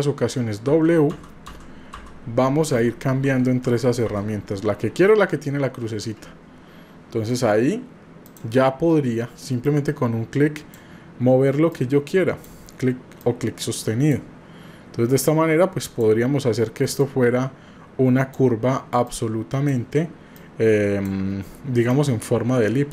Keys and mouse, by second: 2.8 w, 3.6 w, 4.0 w, 7.0 w, 8.3 click, 9.6-10.8 drag, 11.7 click, 13.2 click, 15.2 click, 17.0-18.4 drag, 19.1 click, 20.3 click, 21.9-22.9 drag.